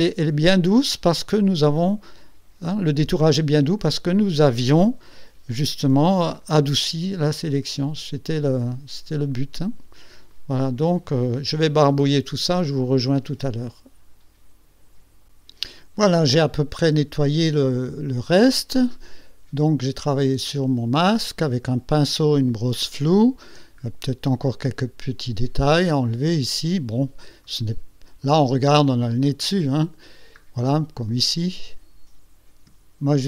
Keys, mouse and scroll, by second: 1.6 click, 3.6 click, 6.0 x, 6.5-8.8 drag, 9.2 x, 9.4 click, 10.4-13.3 drag, 13.4-15.5 drag, 16.7-17.0 ctrl+scroll up 2, 17.2 ctrl+scroll down 2, 17.8-19.1 middle drag, 20.3 click, 21.3 middle click, 23.9 ctrl+scroll up 2, 24.6-27.3 ctrl+drag, 27.9 click, 28.4 middle click, 29.4 click, 30.1 click, 31.2-32.4 drag.